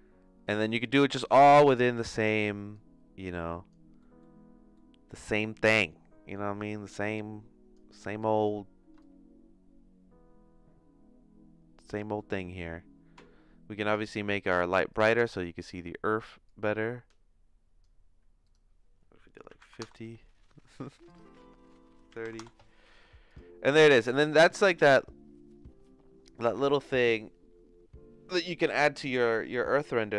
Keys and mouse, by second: 1.3 click, 2.8 click, 4.2 middle click, 4.9 middle click, 5.7-7.8 drag, 8.2 click, 9.1-11.9 shift+drag, 12.3 middle click, 14.9 click, 16.4-17.8 drag, 18.4-20.4 drag, 21.2-22.8 drag, 23.3 click.